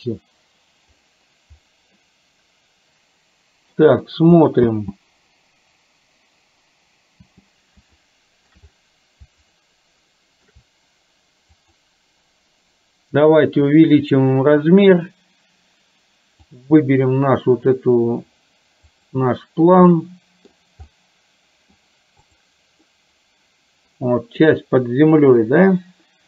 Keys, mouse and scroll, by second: 2.0-4.0 middle drag, 5.0 space, 7.3 space, 8.0 shift+middle click, 9.7 shift+middle click, 16.5 click, 19.0 click, 20.2 middle click, 21.0 middle click, 22.4 click, 22.9-24.6 middle drag.